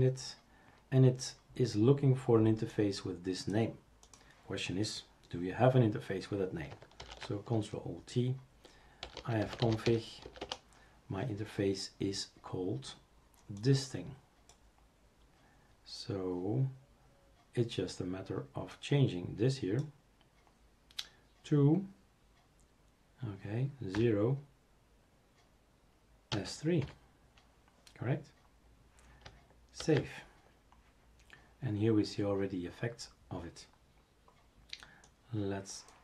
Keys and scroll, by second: 7.0 ctrl+alt+t, 9.0 typing, 10.4 Return, 10.4-11.4 typing, 24.0 0, 26.3 s, 27.6-28.3 typing, 29.8 ctrl+s.